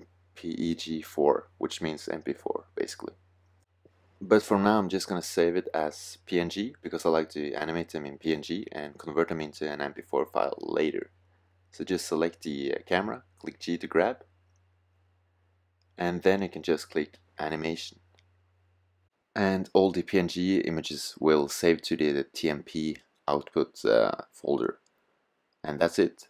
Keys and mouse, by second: 3.6-8.8 drag, 8.8-10.6 middle drag, 10.6-12.3 drag, 12.2 g, 25.7 click.